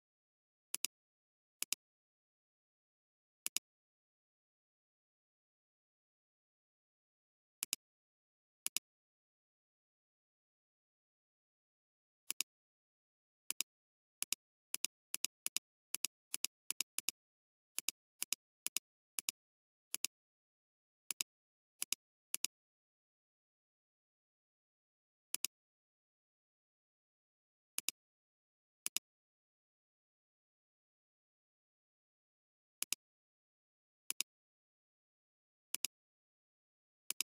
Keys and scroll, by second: 0.7 alt+space, 1.6 space, 3.4 alt+space, 7.5 alt+space, 22.5 space, 23.2 alt+space, 25.1 ], 27.7 shift+space, 28.5 shift+space, 32.8 alt+space, 34.0 typing.